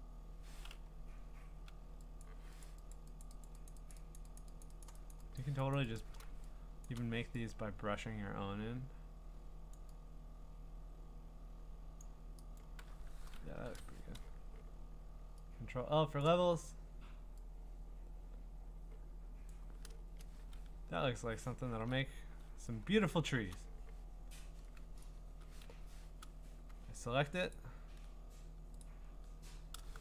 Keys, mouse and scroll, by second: 0.8-1.7 ], 2.2 click, 2.6 click, 2.9 click, 3.2 click, 3.4 click, 3.7 click, 3.9 click, 4.2 click, 4.4 click, 4.6 click, 4.8 click, 5.1 click, 5.4 click, 5.7 click, 6.0 click, 6.8 click, 6.8 click, 9.7 click, 12.0 click, 12.6 click, 13.5 ctrl+i, 16.2 click, 19.5 click, 20.0 Return, 20.7-21.5 scroll up 9, 21.5-21.9 scroll down 5, 23.2 scroll, 23.3 click, 25.0 right click, 25.6 Escape, 27.5 ctrl+click, 28.8 ctrl+click.